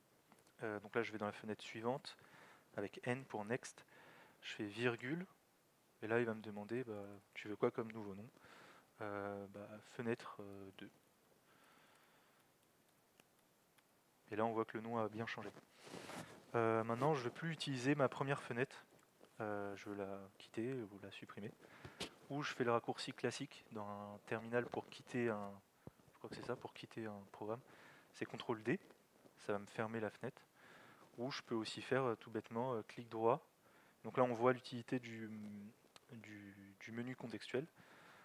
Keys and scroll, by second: 0.6 alt+x, 1.0 n, 4.4 alt+x, 10.0-13.9 typing.